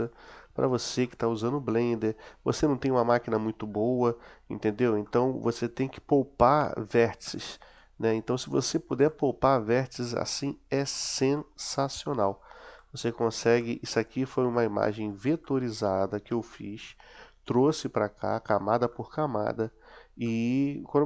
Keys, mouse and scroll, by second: 1.0-2.0 middle drag, 2.6-4.8 middle drag, 5.0-6.2 middle drag, 6.4 middle click, 7.2-7.8 middle drag, 8.1-8.8 middle drag, 9.1-9.8 middle drag, 10.1-11.0 middle drag, 11.3-12.5 middle drag, 12.8 middle click, 13.6-14.1 middle drag, 14.5-15.1 middle drag, 15.4 middle click, 16.3-18.7 middle drag, 19.0-19.8 middle drag, 20.4 middle click.